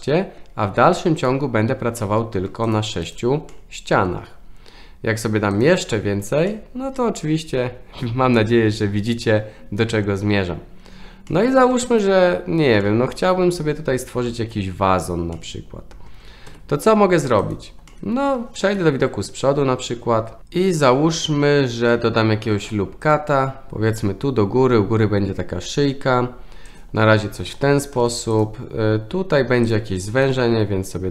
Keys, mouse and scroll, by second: 1.1 click, 1.9-2.3 middle drag, 2.6 click, 3.5 middle click, 6.4-9.3 middle drag, 11.2-11.6 middle drag, 12.8-14.7 middle drag, 15.3 middle click, 16.4 2, 17.4 click, 17.9 middle click, 18.7 KP_1, 22.5 ctrl+r, 26.8 drag, 27.9 ctrl+r, 30.2 s.